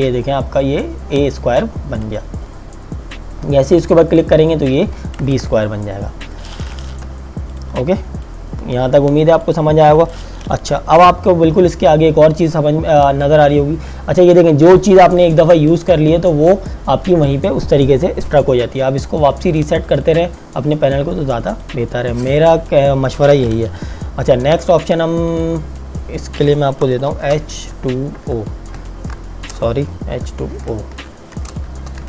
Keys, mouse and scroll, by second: 5.2 KP_Enter, 7.2 v, 7.6 click, 15.1 click, 19.9 click, 24.5 t, 25.3 click, 27.1 h, 27.7 KP_2, 28.1 KP_0, 29.5 BackSpace, 30.2 o, 31.3 BackSpace, 31.7 o.